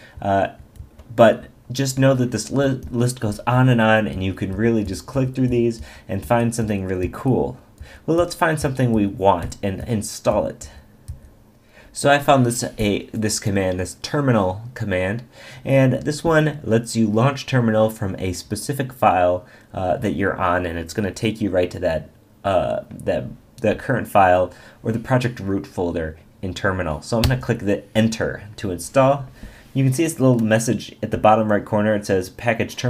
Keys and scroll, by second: 11.4 Down, 27.2 Return.